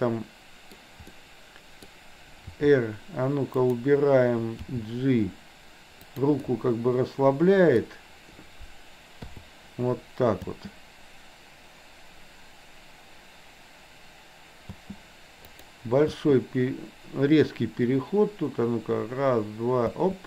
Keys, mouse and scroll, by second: 1.1 middle click, 2.5 r, 4.7 g, 6.5-7.8 middle drag, 10.5 space, 14.7 space, 15.6 click, 16.2 space, 20.0 space.